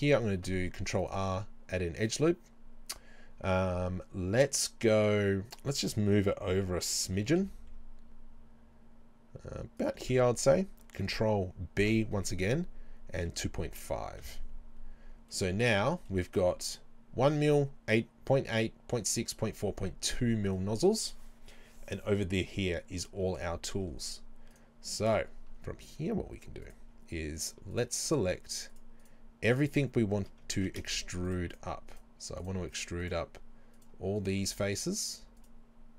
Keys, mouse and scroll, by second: 0.0-2.1 middle drag, 2.1-5.4 right drag, 7.1 g, 9.9 ctrl+click, 11.8 ctrl+b, 14.3 KP_Enter, 14.9 scroll down 1, 15.3-24.5 middle drag, 23.6-24.1 scroll up 2, 24.1-24.5 scroll up 1, 24.5 click, 25.0-26.7 middle drag, 26.7 alt+right click, 27.4 right click, 27.7 shift+right click, 28.1 shift+right click, 29.5 shift+right click, 30.6 ctrl+z, 30.9 shift+right click, 31.5 shift+right click, 31.9 shift+right click, 33.0 shift+right click, 35.4 shift+right click.